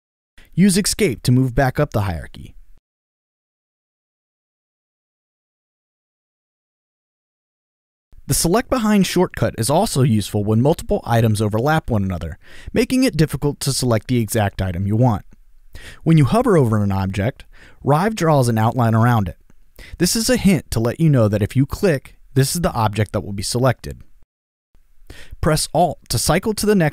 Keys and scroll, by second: 1.1 Return, 3.0 Escape.